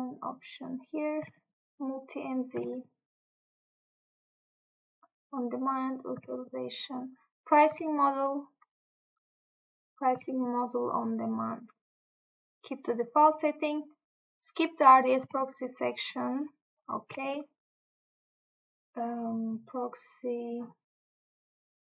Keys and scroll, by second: 1.3 Tab, 2.7 Tab, 6.3 Tab, 7.8 Tab, 10.3 Tab, 17.1 Tab.